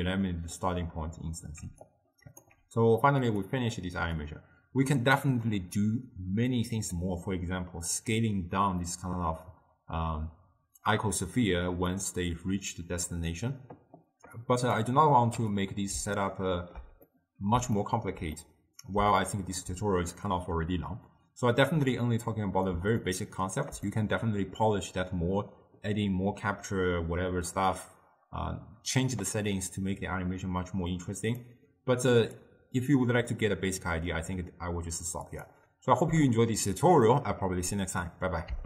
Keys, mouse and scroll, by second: 1.7 d, 2.0 right click, 2.6 d, 3.0 d, 3.4-12.0 drag, 14.5-15.7 drag, 16.2-21.8 ctrl+middle drag, 21.8-23.1 drag, 23.1-27.0 ctrl+middle drag, 31.3-35.2 drag, 35.3-38.5 drag.